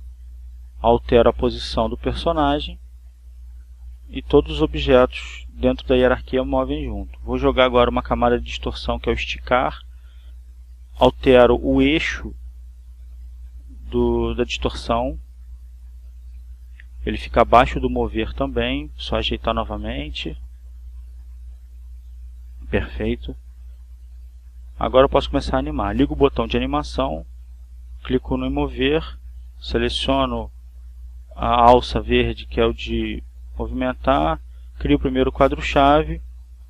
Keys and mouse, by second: 0.8-1.8 drag, 5.6 right click, 9.3 click, 10.9-13.6 drag, 16.2 click, 18.9-22.7 drag, 26.7 click, 28.1 click, 29.1 click, 30.7 BackSpace, 34.1 click, 35.7 click.